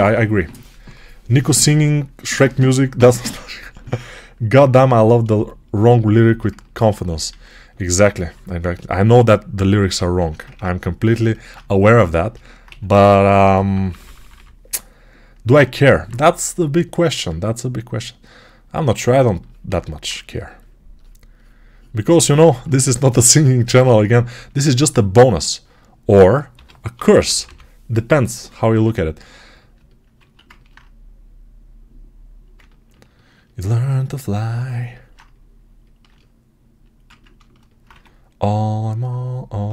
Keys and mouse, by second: 7.2 alt+q, 8.9 r, 10.1 ctrl+r, 12.5 1, 13.2 [, 13.4-15.7 [, 15.7-22.3 alt+drag, 26.4 g, 26.9 ], 27.0 ], 30.1 alt+q, 32.5 ctrl+alt+click, 33.4-39.7 alt+right drag, 37.8 1.